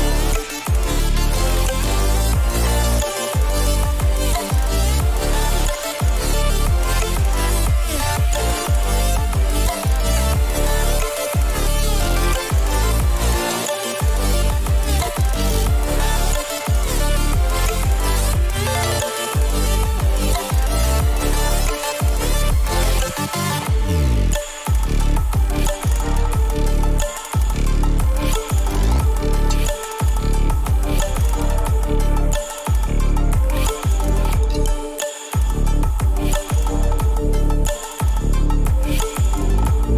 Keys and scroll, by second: 1.5 ctrl+-, 16.5 Return, 18.4 ctrl+j, 24.9 ctrl+u, 27.0 Return, 29.0 ctrl+t, 39.0 Return, 39.4 =.